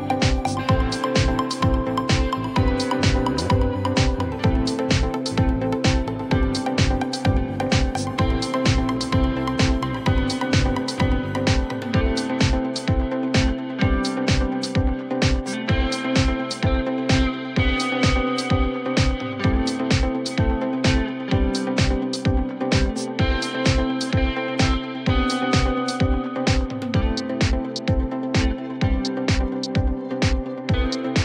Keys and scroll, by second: 3.4 ctrl+BackSpace, 4.0 alt+1, 5.5-6.3 typing, 6.6 F4, 8.9 alt+1, 10.2 alt+1, 12.2 alt+x, 13.3 1, 18.6 w, 19.6 F4, 20.6 alt+q, 21.2 F4, 22.8 F4.